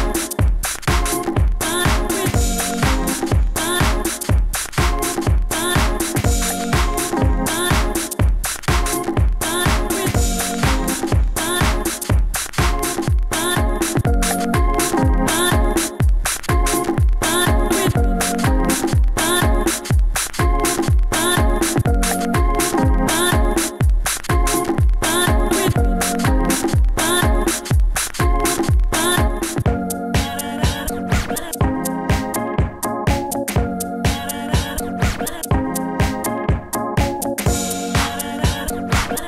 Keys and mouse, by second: 0.8 f, 2.9 f, 3.4 f, 5.7 f, 6.1 f, 9.3 s, 9.5 f, 9.7 f, 10.3 f, 14.3 f, 15.2 Tab, 15.4 Tab, 17.2 s, 19.4 shift+f, 22.5-23.2 drag, 24.5 s, 24.6 shift+f, 26.4 shift+f, 31.1 shift+f, 32.6 s, 33.9 ctrl+z, 34.0 shift+f, 35.5 ctrl+z, 35.6 shift+f, 36.2-38.7 drag, 39.1-39.2 drag.